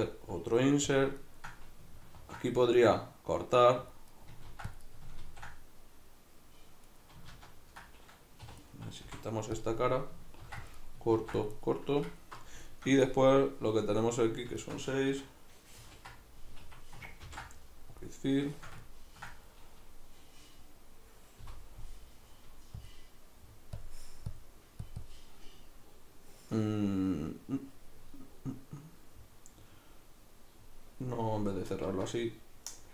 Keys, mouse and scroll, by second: 1.0 click, 1.2-2.2 ctrl+middle drag, 2.2 ctrl+r, 4.2 right click, 4.5 ctrl+r, 5.0 right click, 5.2 ctrl+r, 7.0 right click, 7.3 ctrl+z, 8.5 3, 8.6 right click, 9.1 x, 10.5 ctrl+r, 10.9 right click, 11.2 ctrl+r, 12.1 alt+right click, 12.7-25.0 shift+middle drag, 15.8 ctrl+g, 16.7 Escape, 17.3 ctrl+f, 21.4 F9, 25.0-32.9 drag, 31.7 ctrl+z.